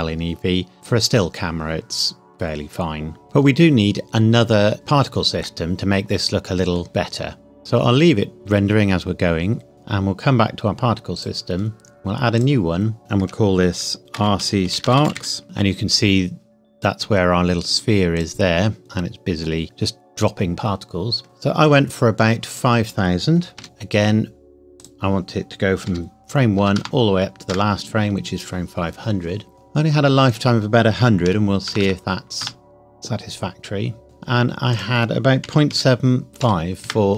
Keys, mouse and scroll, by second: 3.2 click, 5.4 middle click, 9.7 click, 11.1 click, 14.1-15.1 typing, 16.3-16.7 scroll up 1, 18.1 click, 18.8 middle click, 19.7 click, 22.5 click, 22.7 click, 23.5 KP_5, 23.6 KP_Enter, 24.7 click, 25.8 KP_5, 26.5 KP_0, 27.4 KP_Enter, 30.3 click, 31.2 KP_1, 31.7 KP_0, 32.4 KP_Enter, 34.7 click, 35.4 KP_Decimal, 35.7 KP_8, 36.3 KP_7, 36.3 KP_5, 36.8 KP_Enter.